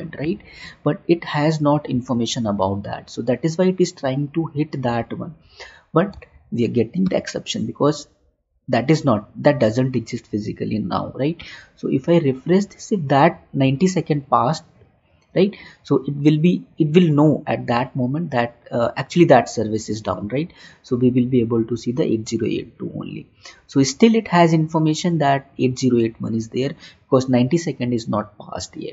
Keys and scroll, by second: 6.6 alt+Tab.